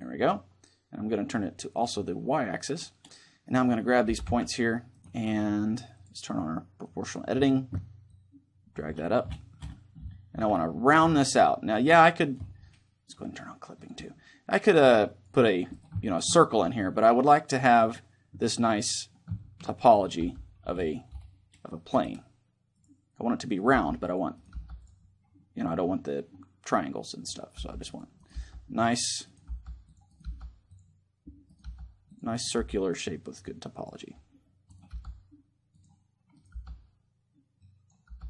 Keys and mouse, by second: 1.5-3.2 drag, 3.2-6.8 right drag, 3.8 g, 5.6-7.4 drag, 7.8-9.6 drag, 13.5-19.1 drag, 15.4-17.2 right drag, 15.8-17.4 middle drag, 19.1 middle click, 19.6-20.8 drag, 19.6-21.4 right drag, 19.9 g, 22.5-24.3 drag, 23.2-24.3 right drag, 23.4 g, 24.3 g, 27.0 right click, 27.3 g, 28.0 g, 29.2 g, 30.0 g, 31.4 g, 32.3 g, 33.8 click, 34.6 g, 35.2 click, 35.4 right click, 36.2 g, 37.3 click, 37.8-38.2 drag, 37.8 g.